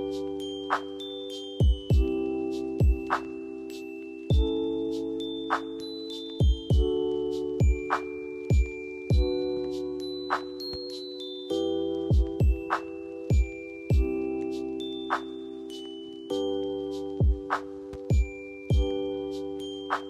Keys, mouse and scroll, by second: 1.2 F4, 2.7 click, 6.0 F4, 8.4-13.0 drag, 13.0 F4, 13.8 click, 19.8 click, 19.9 click.